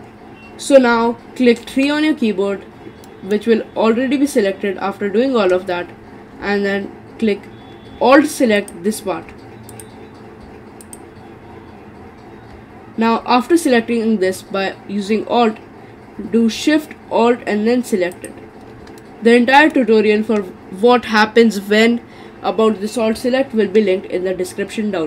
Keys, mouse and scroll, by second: 1.7 3, 2.4-3.1 scroll up 2, 3.1-6.1 middle drag, 6.1-8.6 scroll up 1, 8.6 alt+click, 9.7 click, 10.8 alt+click, 18.1 alt+shift+click, 19.0-22.1 middle drag.